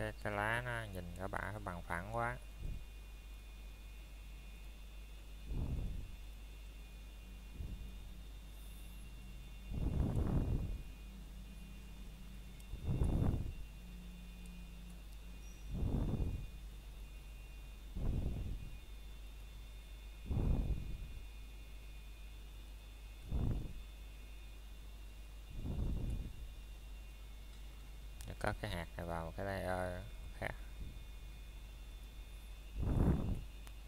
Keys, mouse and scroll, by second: 0.5 middle click, 1.6 click, 2.5 middle click, 3.2 click, 3.5 middle click, 4.9 ctrl+click, 6.9-7.2 scroll down 1, 7.2 middle click, 7.6 scroll up 1, 8.0 middle click, 8.2 scroll down 1, 8.5 shift+middle click, 9.2 scroll up 1, 9.2 typing, 9.9 middle click, 10.3 scroll up 1, 10.7 middle click, 11.0 shift+middle click, 11.8 scroll up 1, 12.0 middle click, 12.5 shift+middle click, 13.1 scroll down 1, 13.6 middle click, 15.2-15.8 scroll up 1, 15.9 Tab, 17.2 click, 17.6 middle click, 17.8-18.3 scroll down 1, 18.3 middle click, 18.9 scroll down 1, 19.2 middle click, 19.7 scroll up 1, 20.5 middle click, 21.4-21.7 scroll down 1, 21.7 middle click, 22.2-22.8 scroll up 1, 22.8 middle click, 23.9 shift+middle click, 24.2 scroll down 1, 25.0 middle click, 25.5-26.3 scroll up 1, 26.3 middle click, 27.4 click, 28.7 m, 30.7 click, 31.3 middle click, 32.2 scroll up 1, 32.9 click, 33.3 middle click.